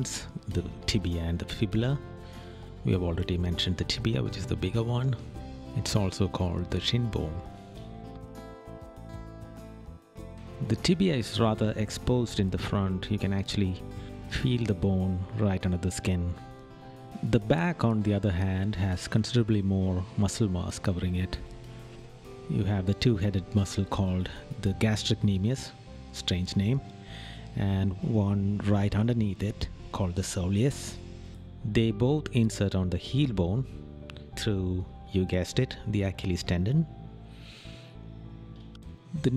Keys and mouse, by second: 2.2 right click, 3.3 right click, 6.1 right click, 8.3 right click, 10.4 right click, 12.1 right click, 15.9 right click, 17.3 right click, 18.7 right click, 20.1 right click, 24.2 right click, 25.2 right click, 37.1 right click.